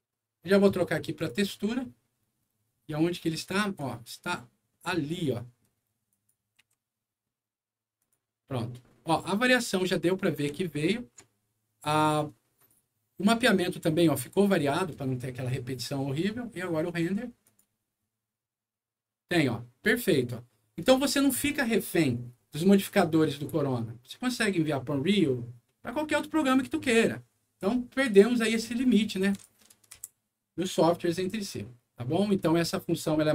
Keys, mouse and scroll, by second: 1.2 click, 2.1-2.9 scroll down 4, 3.2 scroll up 2, 3.8 right click, 4.7 middle click, 5.1 middle click, 6.1 click, 6.6 g, 8.0 click, 8.5-9.0 scroll up 2, 9.2 middle click, 9.8 scroll up 1, 10.5 shift+middle click, 11.3 shift+scroll up 2, 12.0 shift+middle click, 13.4-14.8 shift+middle drag, 16.8 click, 17.4 click, 19.3-21.2 middle drag, 22.1-24.7 middle drag, 25.6-27.0 middle drag, 29.3 click, 29.9 Delete, 31.3 click, 32.2 click.